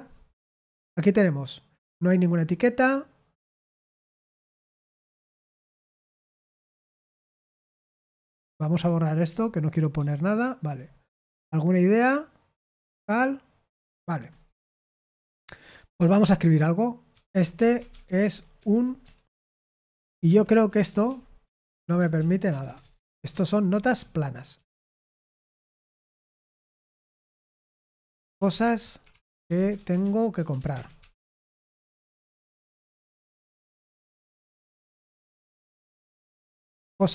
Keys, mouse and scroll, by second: 18.1-23.2 typing, 25.6 Return, 28.5-34.1 typing, 34.9-37.1 drag.